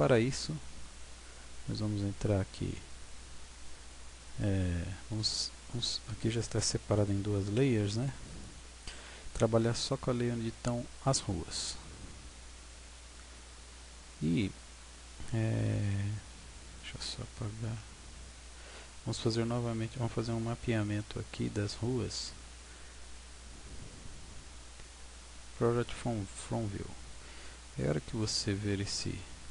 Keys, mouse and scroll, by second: 0.5-2.1 scroll down 2, 6.9 right click, 8.3 click, 11.3 Tab, 12.5-12.9 scroll down 5, 13.1 scroll up 3, 13.7-14.6 scroll down 6, 19.1-19.7 scroll up 4, 19.7-20.8 scroll down 2, 21.5 scroll up 3, 21.8-22.3 scroll down 1, 22.3 scroll down 1, 23.5 u, 26.8 scroll up 1, 27.1 scroll down 1, 27.6 scroll down 2, 27.8-28.7 scroll up 7, 29.1 middle click.